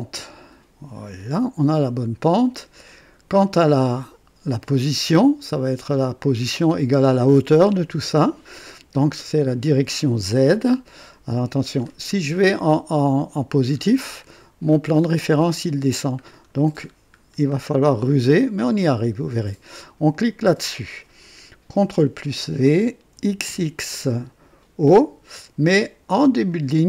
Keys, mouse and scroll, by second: 0.0 click, 1.1 click, 4.7-6.1 drag, 11.7-12.0 scroll up 1, 13.1-13.4 scroll up 1, 13.7-14.1 scroll up 2, 14.3 click, 16.2-17.7 scroll down 4, 18.3 scroll up 1, 20.1 click, 21.8 ctrl+v, 23.1 x, 23.4 x, 24.9 click, 26.4 click.